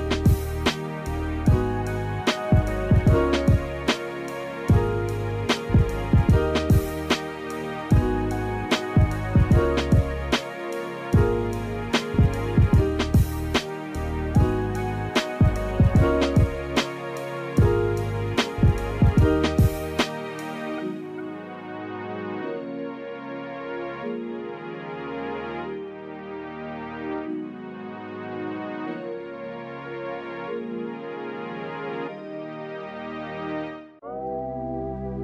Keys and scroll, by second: 3.7 space, 6.4 space, 7.1 space, 8.0 space, 9.4 space, 11.9 space, 12.7 space, 15.2 space, 16.4 space, 17.3 space, 18.7 space, 20.1 space, 21.2 space, 23.3 space, 24.3 space, 24.5 ctrl+z, 25.8 space, 31.2 space, 32.6 space.